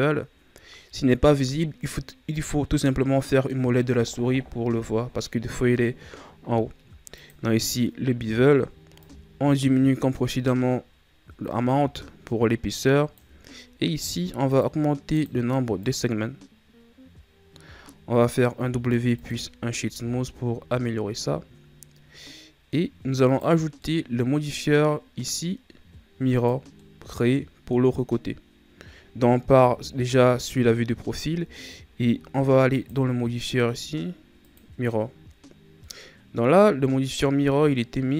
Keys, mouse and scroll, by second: 9.0-12.1 drag, 14.5-18.6 drag, 18.6 w, 19.9 a, 20.3-20.8 scroll down 3, 20.8-23.2 middle drag, 23.2 right click, 23.7-26.3 middle drag, 26.3 click, 26.7-29.6 middle drag, 29.6 KP_3, 31.6-32.7 ctrl+scroll up 3, 32.7-35.7 drag, 35.8-38.1 middle drag.